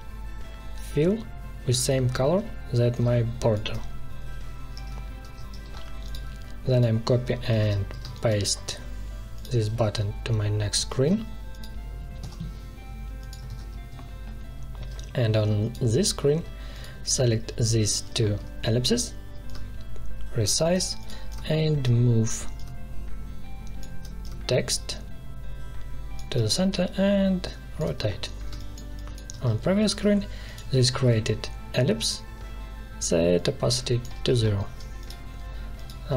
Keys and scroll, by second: 5.2 ctrl+z, 7.4 ctrl+c, 7.9 space, 9.6 ctrl+v, 10.7 ctrl+z, 12.2 Delete, 13.4 ctrl+v, 28.5 space.